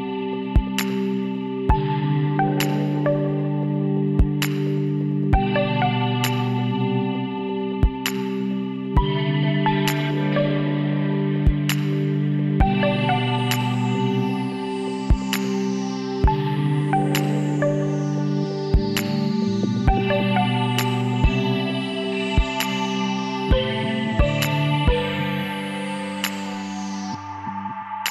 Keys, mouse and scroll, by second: 1.5 e, 3.1-4.9 drag, 6.4-8.7 middle drag, 8.7 f, 9.5 Tab, 12.9-14.2 middle drag, 14.2 m, 15.7 m, 17.8 KP_Divide, 18.5-19.7 middle drag, 21.0 m, 24.2-25.2 drag, 25.2-27.2 middle drag.